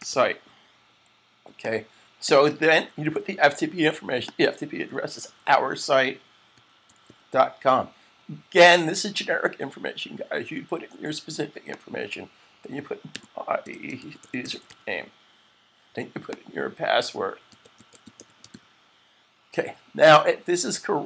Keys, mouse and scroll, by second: 0.0-0.5 typing, 1.4 click, 2.8 super+c, 2.8 click, 4.2 click, 4.8 click, 5.1 super+v, 6.2-7.6 typing, 11.6 click, 12.3-15.1 typing, 16.2 click.